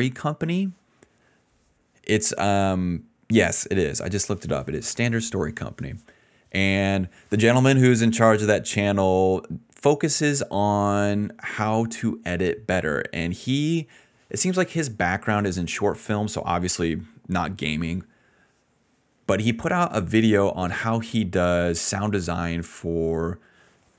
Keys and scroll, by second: 0.0-1.2 typing, 12.0-13.2 typing, 18.4 d, 18.7 d, 19.8 s, 20.5 space, 20.7 space.